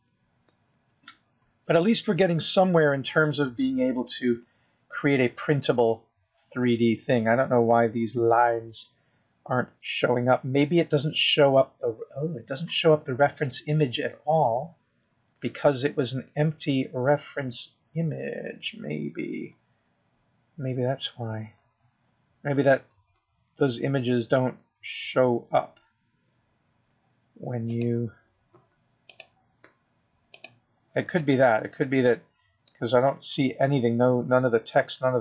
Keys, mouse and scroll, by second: 4.9 KP_0, 5.7 scroll up 1, 6.1 scroll down 4, 6.9-7.9 scroll up 3, 19.0-20.2 scroll down 3, 20.2 scroll down 1, 20.5-21.0 scroll down 2, 21.0-22.6 scroll up 2, 30.1 click, 31.5 click, 32.7 click, 34.5 middle click.